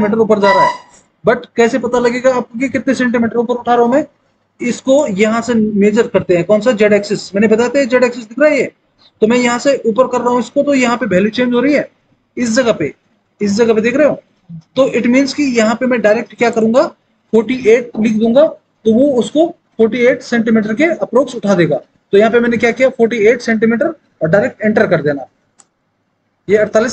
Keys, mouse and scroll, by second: 22.4 KP_4, 23.2 KP_8, 25.6 Return.